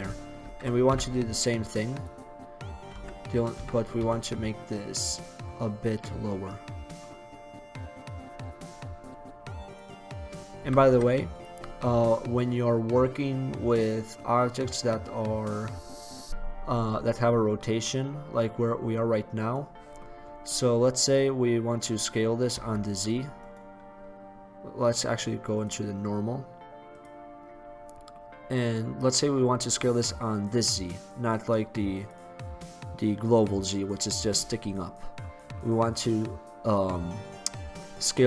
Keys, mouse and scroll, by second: 0.5 shift+d, 2.1 click, 3.0 s, 5.3-9.3 drag, 9.4 click, 10.7 r, 13.6-14.0 right drag, 17.2-19.9 middle drag, 21.2-22.7 middle drag, 22.7 s, 23.5-24.6 drag, 27.6-32.2 middle drag, 34.0-35.2 drag, 35.2-38.2 middle drag.